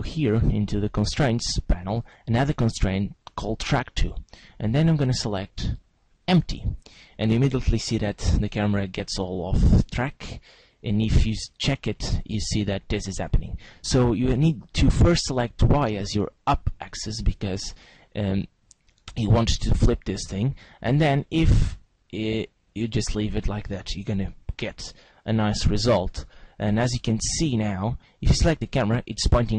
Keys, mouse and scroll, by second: 0.3 click, 1.9 click, 4.4 click, 8.6 click, 10.7-12.5 scroll down 8, 12.5-13.3 scroll down 1, 13.3 scroll up 1, 14.2 click, 18.4 middle click, 21.3 middle click, 25.7 middle click, 28.4 click.